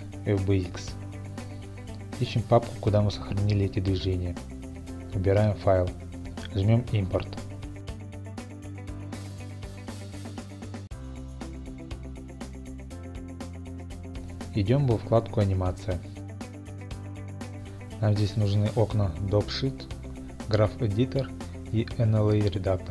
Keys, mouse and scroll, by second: 4.4 click, 6.4 click, 8.2 click, 10.6 scroll up 2, 10.9 scroll, 11.5 scroll up 1, 12.9 scroll, 14.3 click, 15.3 click, 16.5 click, 19.7 click, 20.5 click, 21.4 click.